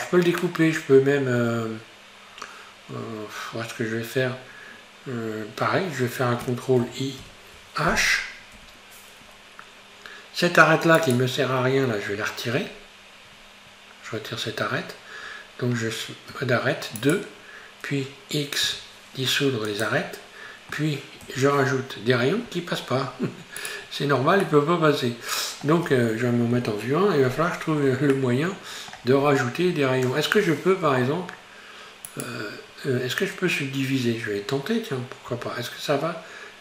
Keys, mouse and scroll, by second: 4.8-7.2 scroll down 2, 7.2 ctrl+i, 8.6 h, 11.0 right click, 12.7 scroll down 1, 13.0-16.3 scroll up 3, 16.3 2, 17.0 right click, 18.7 x, 21.3 ctrl+r, 23.8-24.5 scroll down 4, 24.5-26.6 middle drag, 26.6 KP_1, 27.5-28.2 scroll up 3, 28.2-29.2 shift+middle drag, 29.2-30.9 scroll up 3, 30.9 3, 32.1 right click, 35.3 q.